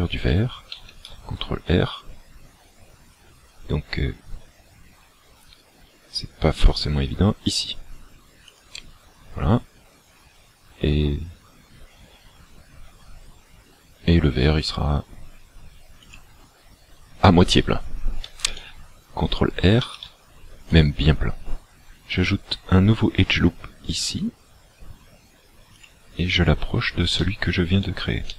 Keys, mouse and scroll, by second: 0.8 ctrl+r, 16.2 click, 19.9 ctrl+r, 25.9 click, 26.4-26.8 scroll up 4, 27.2 shift+middle click.